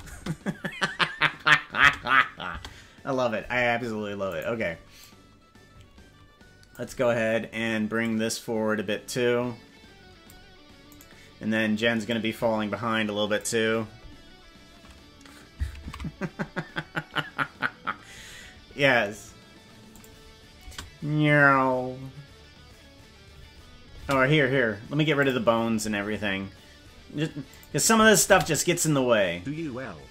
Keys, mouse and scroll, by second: 0.1 space, 1.7 space, 2.5 space, 4.3 right click, 5.0-6.7 drag, 7.9-10.2 drag, 10.9 right click, 12.0-13.4 drag, 17.8 ctrl+s, 19.8 click, 20.6 space, 24.0 space, 25.1 click, 27.5 click, 28.4 space.